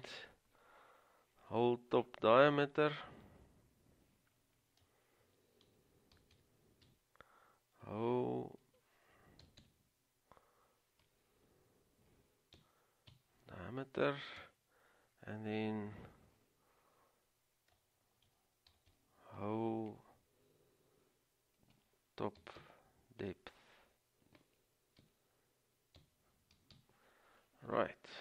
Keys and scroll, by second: 5.6-7.0 typing, 8.8-10.3 typing, 12.1-13.2 typing, 14.5 Return, 18.4-19.5 typing, 21.8-22.7 typing, 25.1 typing, 26.6 typing, 28.1-28.2 typing.